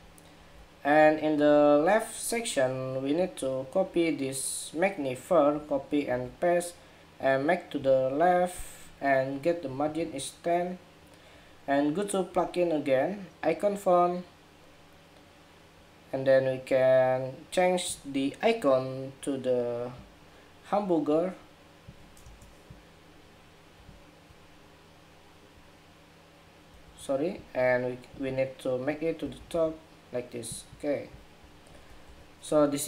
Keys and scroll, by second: 0.1 super+=, 5.2 super+c, 5.8 super+v, 26.5 super+z, 31.8 super+-.